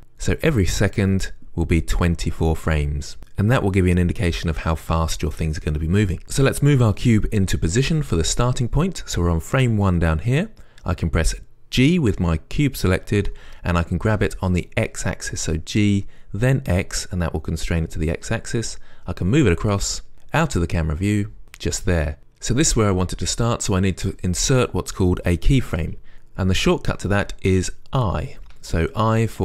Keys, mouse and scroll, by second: 13.3 g, 21.5 click.